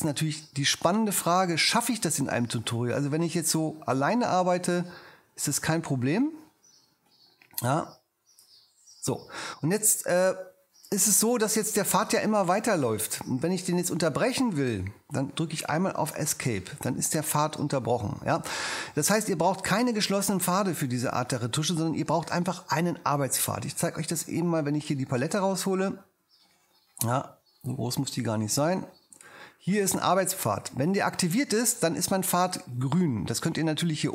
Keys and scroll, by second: 16.2 ⟲.